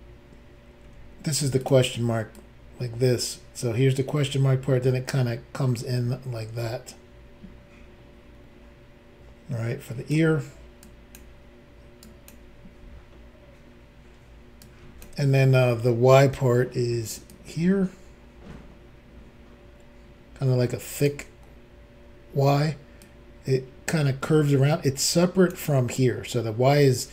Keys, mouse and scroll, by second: 0.9 click, 0.9 f, 1.6 click, 1.7 click, 2.4 click, 10.9 click, 12.0 click, 14.6 click, 17.3 click, 23.0 click.